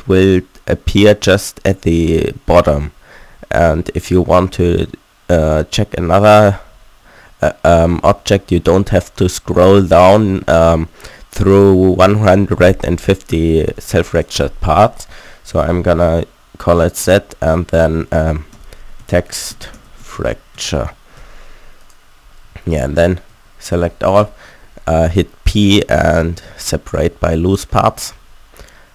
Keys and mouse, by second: 11.2-12.7 drag, 13.8-20.3 drag, 22.6 Tab, 23.3 a, 24.2 p, 28.2 Tab.